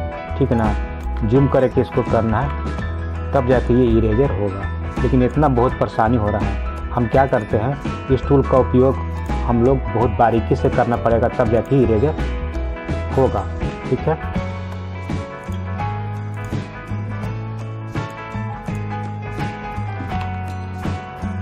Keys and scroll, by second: 20.3 ctrl+alt+z.